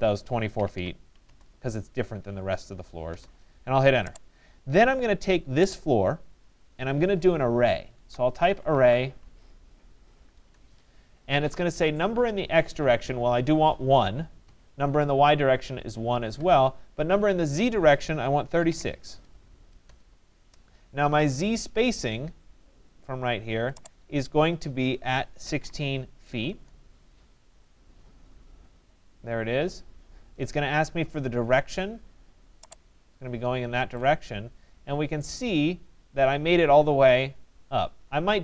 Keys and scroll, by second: 0.3-1.3 typing, 8.7 y, 10.4 Return, 14.1 Return, 18.3-19.2 typing, 19.9 Return, 25.0 1, 25.6 6, 26.5 Return.